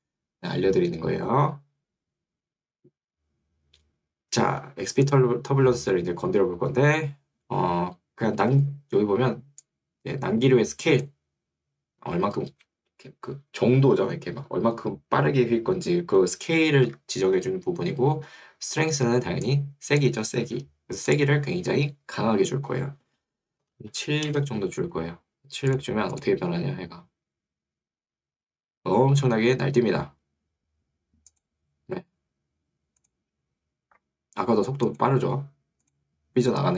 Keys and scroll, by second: 17.0 Escape, 20.6 Escape, 23.4-24.3 typing, 24.4 Return.